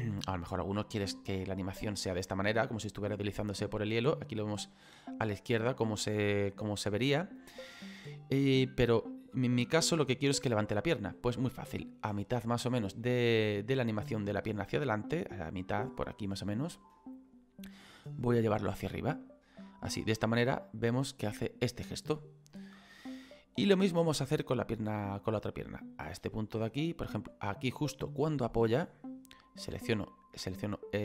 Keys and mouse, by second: 5.7 click, 17.2 click, 19.6 click, 29.8 right click.